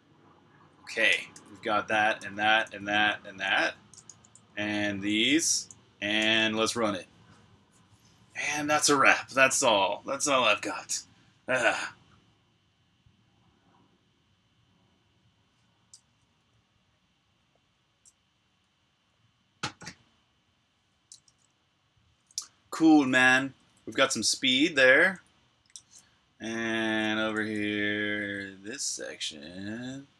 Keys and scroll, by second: 0.9 super+k, 3.9 Return, 4.8-7.3 typing, 6.0 super+r, 7.3 super+h, 16.2-17.8 typing, 20.4 typing, 22.0 l, 23.2-30.1 typing.